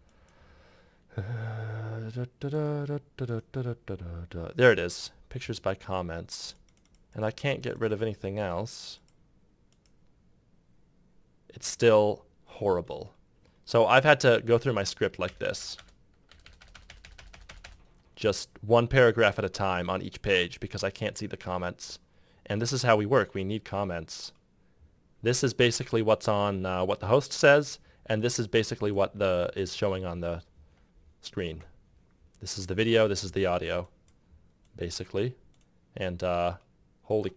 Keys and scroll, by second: 15.0 Return, 15.4 Return.